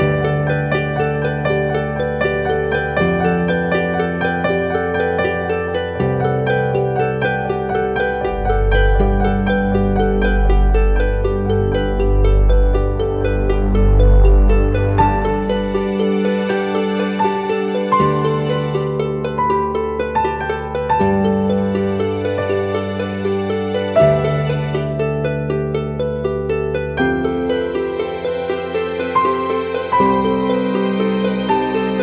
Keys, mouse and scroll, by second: 7.4 ctrl+t, 8.1 alt+shift+click, 10.9 Return, 11.8 Down, 13.6 Down, 13.8 ctrl+t, 14.5 alt+shift+click, 16.5 shift+Return.